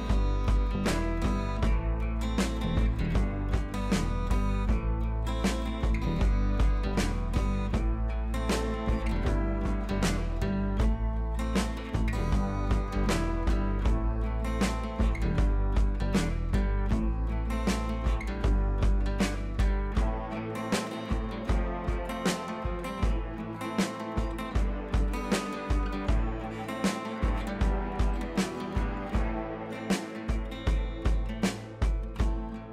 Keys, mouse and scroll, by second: 0.9-5.7 drag, 7.0 click, 7.9 scroll up 1, 8.9 ctrl+l, 9.8-12.4 drag, 13.0 scroll down 1, 13.4 click, 13.6 scroll down 1, 16.0 click, 21.0 scroll up 1, 21.7 b, 22.4 ], 22.7 ], 23.4 click, 25.1 scroll up 1, 25.2-26.8 typing, 25.4 click, 27.0-27.4 click, 27.7 ctrl+z, 28.6 ctrl+z, 29.1 scroll down 1, 29.5 b, 30.0-30.6 drag.